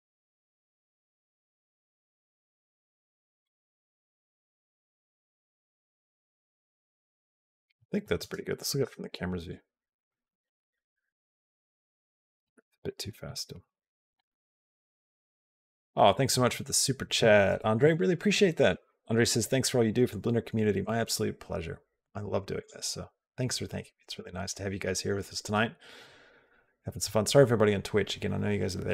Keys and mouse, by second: 3.4-4.7 drag, 8.1 space, 8.6 KP_0, 10.0 click, 10.1 space, 13.4 space, 13.5 g, 14.6 click, 15.2 space, 22.5 click.